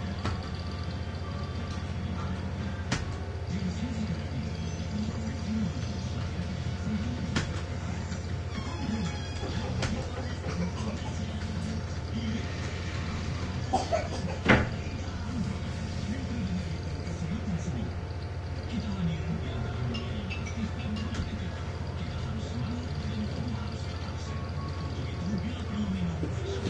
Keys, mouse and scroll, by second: 0.4 space, 2.3 shift+7, 3.0 shift+space, 6.1-13.5 typing, 17.7 click, 19.6 1, 20.0 5, 21.2 Return, 22.9 click, 23.7-25.6 drag.